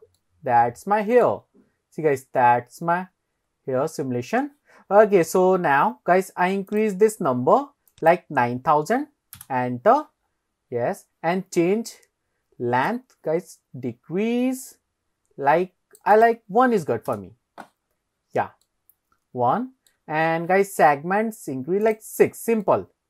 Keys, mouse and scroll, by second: 0.2-1.3 middle drag, 1.5-1.8 scroll down 2, 2.3-3.3 scroll down 6, 3.4-5.0 scroll up 6, 6.7-9.5 drag, 10.3-10.9 scroll down 1, 10.9 scroll down 1, 10.9-11.3 scroll up 2, 12.9-15.1 drag, 16.2 click, 17.9-18.4 scroll down 2, 18.5 scroll up 1, 18.7-19.9 middle drag, 20.2-20.5 scroll up 1, 21.9 click, 22.7-23.0 middle drag.